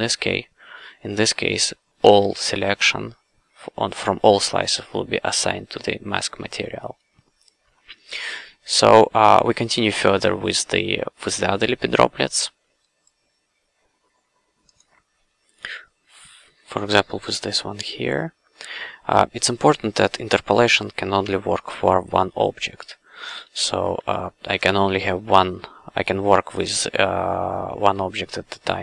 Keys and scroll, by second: 2.0 q, 23.3 f.